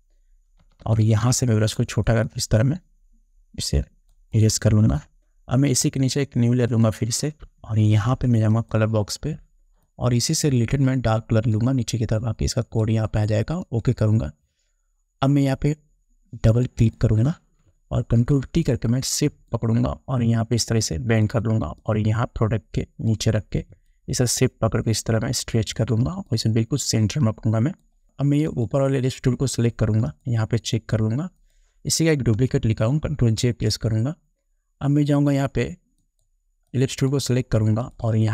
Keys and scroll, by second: 18.4 ctrl+t, 33.6 ctrl+j.